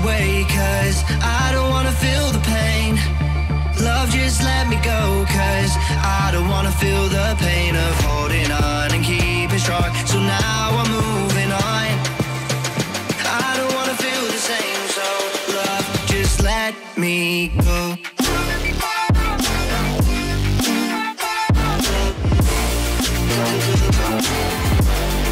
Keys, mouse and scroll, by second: 0.3-1.0 scroll down 2, 1.4 click, 1.5 middle drag, 1.8 click, 1.9-3.1 middle drag, 3.1 scroll up 1, 3.2-3.7 middle drag, 3.7 click, 3.8-4.6 middle drag, 4.7-5.0 scroll down 2, 5.0-5.8 middle drag, 6.8 click, 7.0 click, 7.3 g, 8.8 scroll up 3, 8.9 shift+middle click, 9.2 g, 10.0 scroll down 3, 10.1 click, 10.2-11.0 middle drag, 11.2 click, 11.4 r, 12.4 click, 12.7 click, 12.8 click, 13.0 scroll down 3, 13.2 shift+middle click, 13.3 scroll up 3, 13.4-13.8 shift+middle drag, 13.8 click, 14.0 scroll down 1, 14.2 s, 14.5 g, 14.9 s, 15.2 scroll up 4, 15.4 shift+middle click, 15.7 g, 16.1-17.1 scroll down 3, 16.2 click, 17.4 middle click, 18.1 click, 18.2 middle drag, 18.5-19.1 scroll up 2, 19.1 click, 19.2 scroll down 2, 19.5 click, 19.7 click, 19.9 click, 20.0 click, 20.4 click, 20.9 r, 23.3 g, 24.4 scroll up 2, 24.7 g.